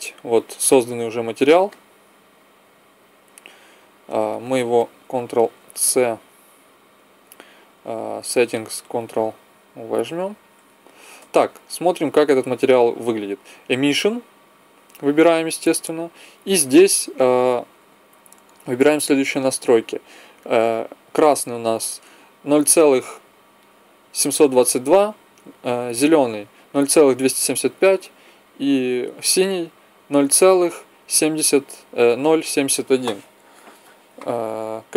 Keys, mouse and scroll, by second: 1.7 middle click, 3.5-4.6 middle drag, 5.7 ctrl+c, 8.1-10.0 drag, 10.1 ctrl+v, 11.4-13.2 drag, 13.2 middle click, 14.1-18.0 drag.